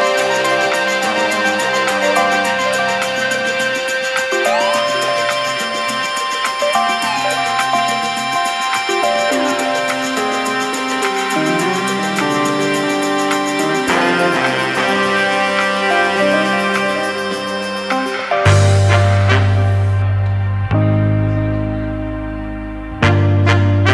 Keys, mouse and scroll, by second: 0.4 middle drag, 0.7 r, 1.9-3.7 middle drag, 3.7 KP_7, 4.0 r, 5.2 g, 5.7 click, 5.9 middle click, 6.5 click, 6.6 middle click, 6.9 g, 7.8 click, 8.0 middle drag, 8.2 scroll down 1, 8.4-9.0 shift+middle drag, 9.0 click, 9.5 shift+d, 10.6 r, 11.7 s, 12.7 KP_7, 13.1 r, 15.1 g, 16.3 middle click, 17.0 g, 17.9 click, 18.1 s, 19.0 g, 19.7 middle click, 20.6-21.2 scroll down 2, 20.8 click, 20.9 middle click, 21.2-23.9 middle drag.